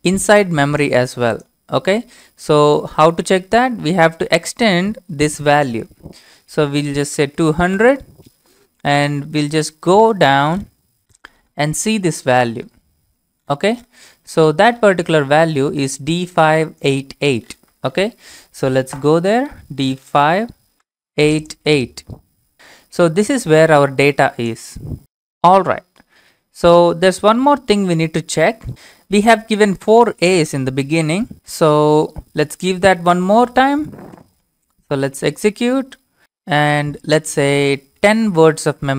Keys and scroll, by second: 6.1 ctrl+c, 6.1 ctrl+v, 6.1 Up, 6.1 Left, 6.1 Down, 7.2 0, 7.8 Return, 27.0-28.7 typing, 33.3 y, 34.2 Return, 36.0-36.7 typing, 36.8-37.6 Left, 38.7 BackSpace, 38.8 BackSpace.